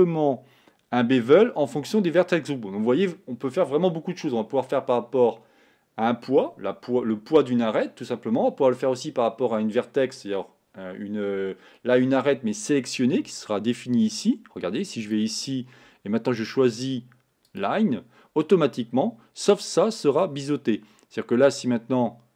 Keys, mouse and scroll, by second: 18.7-22.3 scroll up 2.